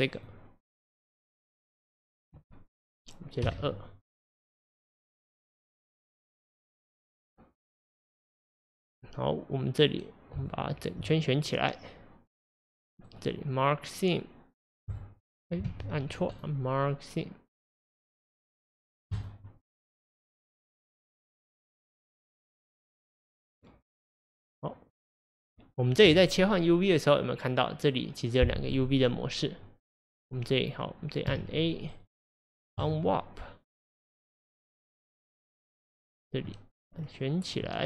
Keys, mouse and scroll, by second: 3.4 2, 4.2 click, 5.1-6.1 drag, 10.5 alt+click, 11.6-15.0 middle drag, 15.0 right click, 15.7 ctrl+z, 19.2-22.2 right drag, 22.2-31.3 drag, 31.3 a, 32.9-35.4 right drag, 35.4 middle click, 36.2 click, 36.5-37.8 middle drag.